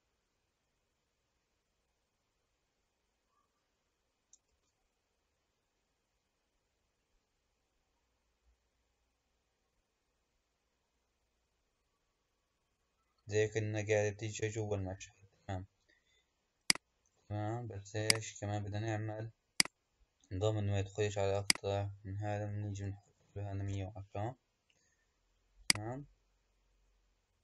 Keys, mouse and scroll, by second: 0.4-2.2 scroll up 6, 2.2-4.3 scroll up 1, 4.5 space, 14.5 space, 16.6-18.1 drag, 19.5 click, 21.3-22.7 drag, 22.7 KP_1, 25.6-27.4 drag.